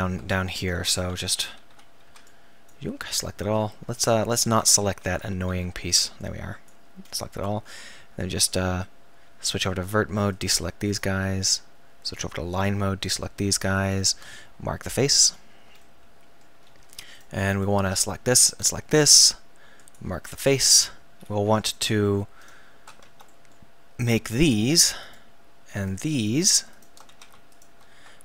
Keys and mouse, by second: 1.2 KP_1, 1.7 a, 2.1 b, 4.5 KP_1, 5.1 a, 5.6 b, 9.5 click, 10.4-11.5 middle drag, 11.5 right click, 12.1-15.4 middle drag, 15.9 click, 16.7-19.8 middle drag, 20.4 click, 21.8-23.3 middle drag, 23.3-24.5 right drag, 27.1 z.